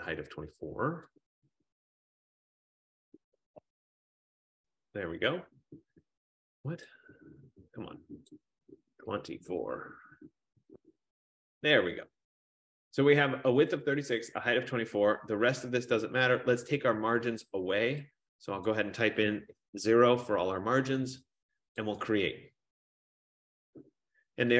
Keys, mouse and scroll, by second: 1.7 click, 2.8 click, 3.4 typing, 4.0 Tab, 7.1 click, 8.5 click, 9.1-9.6 typing, 10.7 Tab, 18.8 click, 19.3 typing, 20.0 Tab, 22.3 click.